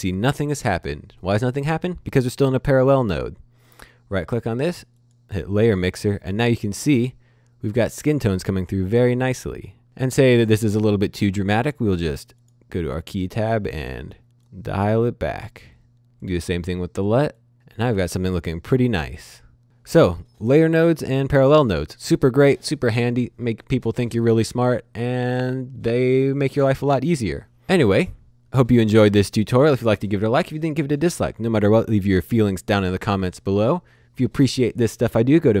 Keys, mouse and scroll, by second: 3.7 right click, 4.9 click, 8.8 click, 11.7 click, 14.4 click.